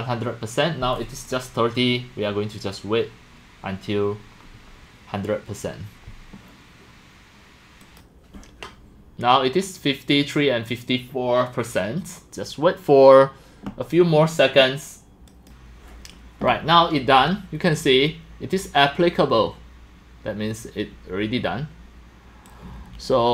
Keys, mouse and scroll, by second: 7.8 click, 8.6-13.1 drag, 15.3 click, 16.3-20.4 drag, 22.5 click.